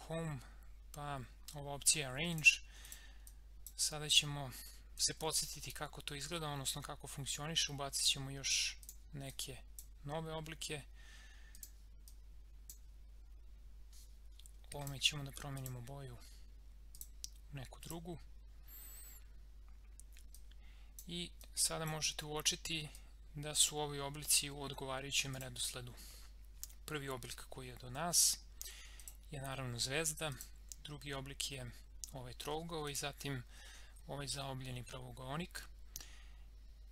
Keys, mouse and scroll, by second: 2.4-5.0 drag, 8.8-14.8 drag, 20.4-25.3 drag, 29.0 click, 32.8 click.